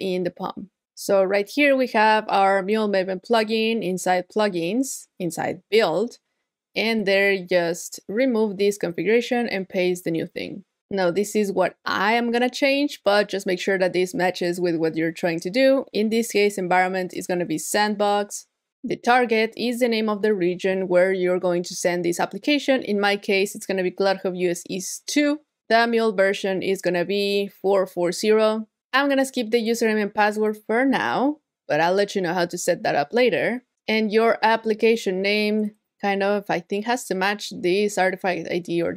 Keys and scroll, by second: 9.6 super+v, 22.9 super+v, 26.9 super+v, 36.5 super+c.